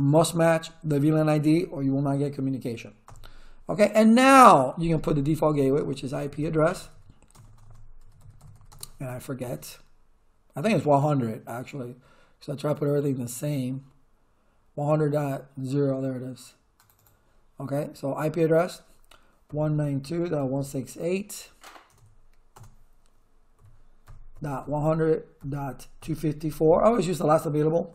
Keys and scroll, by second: 3.0 Return, 5.3-8.9 typing, 19.2-21.9 typing, 23.3-27.9 typing.